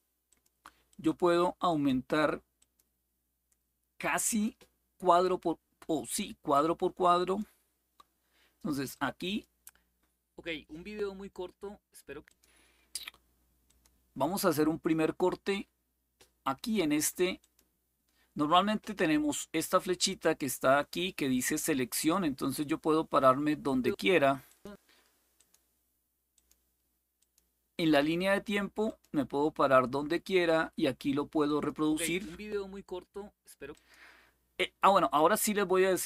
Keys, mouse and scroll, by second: 0.0 click, 0.6 click, 1.4 click, 2.3 click, 4.0 click, 6.9 click, 8.7 click, 12.0 click, 13.4 click, 17.1 click, 22.2 click, 23.4 click, 24.2 click, 25.1 click, 26.1 click, 26.9 click, 28.6 click, 31.2 click, 33.5 click.